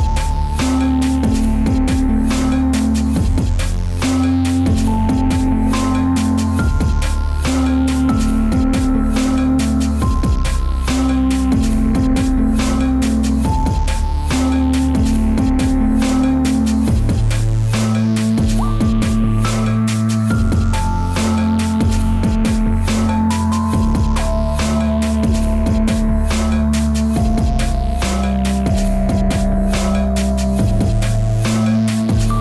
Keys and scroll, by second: 11.6 space, 20.3 ctrl+z, 21.4 ctrl+z, 21.9 ctrl+t, 22.5 ctrl+z, 24.7 ctrl+z, 25.3 ctrl+t, 25.9 ctrl+z, 26.6 ctrl+z, 27.5 ctrl+z, 32.3 ctrl+z.